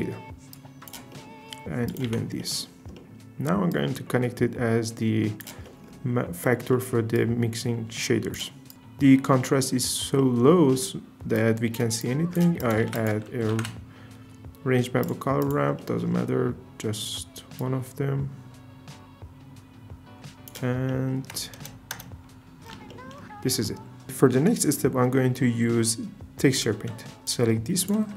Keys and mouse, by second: 0.5 click, 1.9 click, 2.0 x, 3.7 click, 7.7 click, 8.6 click, 10.2 shift+middle click, 11.3 drag, 12.6 click, 12.8 shift+a, 15.4 click, 15.5 typing, 17.6-20.5 drag, 21.9 KP_0.